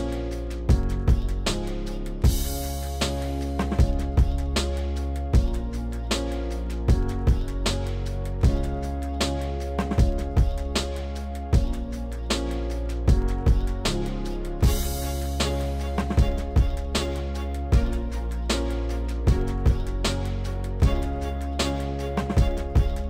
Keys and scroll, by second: 2.3 s, 8.5 ctrl+z, 9.7 ctrl+z, 14.0 s.